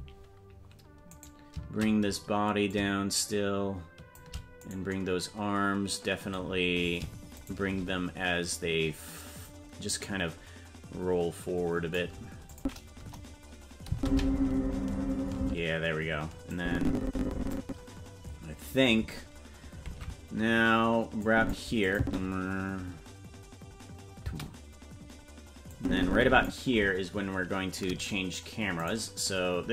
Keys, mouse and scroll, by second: 1.3 right click, 2.7-4.2 shift+drag, 4.7 right click, 7.4 shift+right click, 9.9-12.0 drag, 12.5 click, 13.0 KP_0, 13.9 space, 15.4 space, 16.5-17.6 drag, 19.9 ctrl+Tab, 21.2 click, 21.9 click, 22.0 space, 24.2 space, 25.7 click, 28.9 right click.